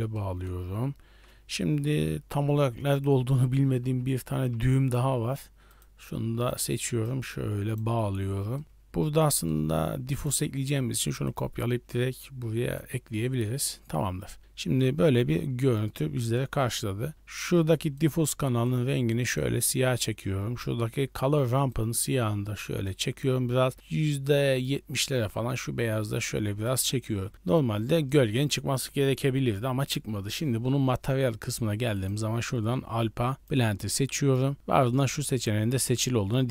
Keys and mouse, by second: 0.1 middle click, 1.0 shift+a, 7.0-7.8 drag, 8.5 middle click, 8.7 shift+a, 10.0 click, 10.5 shift+d, 11.9-12.8 drag, 13.6 middle drag, 14.5-15.8 middle drag, 21.6-22.8 drag, 23.7 click, 25.3-26.6 drag, 28.0-28.3 middle drag, 32.0-33.5 right drag, 35.7-36.5 middle drag.